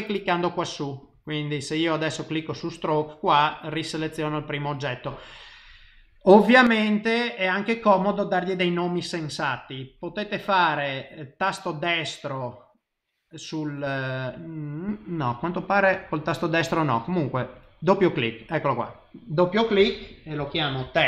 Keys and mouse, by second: 0.5 click, 1.0 click, 3.5 click, 3.9 click, 4.3 click, 4.7 click, 10.6 middle click, 11.5 right click, 15.7 right click, 17.4 click, 17.6 click.